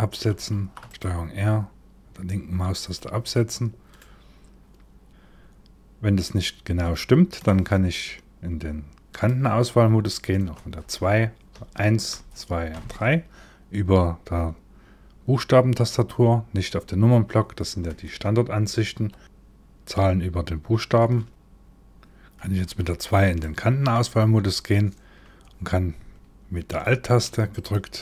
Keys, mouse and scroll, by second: 0.1 ctrl+r, 3.6 middle click, 5.1 scroll up 2, 6.5 middle click, 8.7 click, 10.2 2, 11.1 1, 11.7 2, 12.3 3, 17.5 KP_1, 18.6 KP_7, 19.2 middle click, 19.2 1, 21.2 shift+middle click, 22.2 2, 23.0 middle click, 27.1 alt+click.